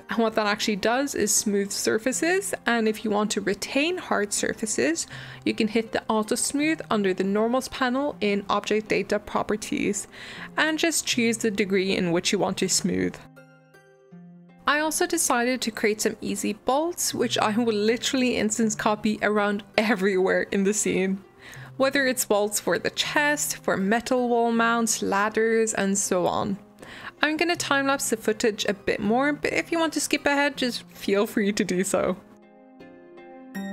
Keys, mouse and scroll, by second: 5.7 click, 6.5 click, 6.9 middle click, 7.2-8.4 scroll up 1, 8.4-8.8 shift+middle drag, 8.8 Tab, 9.3 click, 9.5-14.9 middle drag, 14.9 g, 15.2 middle click, 15.5 g, 15.7 middle click, 15.8 scroll down 1, 16.0 middle click, 16.1 alt+d, 16.8 middle click, 17.4 shift+click, 17.7 click, 18.0 s, 18.4-18.7 shift+middle drag, 18.7 click, 19.2-19.7 scroll down 3, 19.7 scroll up 2, 19.9 drag, 20.1 shift+click, 20.4 m, 21.9 click, 22.0 alt+d, 22.4 ctrl+z, 22.6 click, 22.7 alt+d, 23.2 middle drag, 23.3-23.7 scroll up 3, 23.7 g, 24.3 g, 24.6-24.9 middle drag, 24.9 g, 25.3 scroll down 2, 25.5 m, 26.3 scroll down 1, 26.4 middle drag, 26.6 alt+d, 26.9-27.3 shift+middle drag, 27.3 scroll up 3, 27.5-28.0 shift+middle drag, 28.0 g, 28.3 g, 28.6-29.2 middle drag, 29.2 g, 29.5 scroll down 4, 29.6 shift+middle click, 29.6-30.5 scroll up 2, 29.7 shift+middle drag, 30.5 m, 31.7 drag, 31.8 alt+d, 32.2 middle click, 32.2 scroll up 2, 32.5 shift+middle click, 32.9 Tab, 33.1 click, 33.4 i.